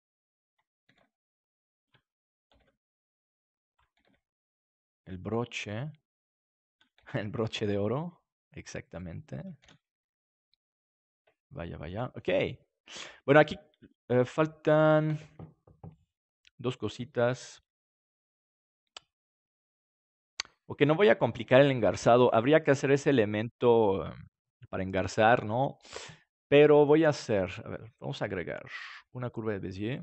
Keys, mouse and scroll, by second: 0.8 shift+d, 1.1 middle click, 2.0 click, 2.5 shift+d, 3.9 shift+d, 5.0 click, 6.9-8.3 drag, 6.9 shift+d, 9.0-10.5 drag, 9.6 ctrl+s, 10.9-16.8 middle drag, 19.7-20.8 middle drag, 27.4-30.0 drag.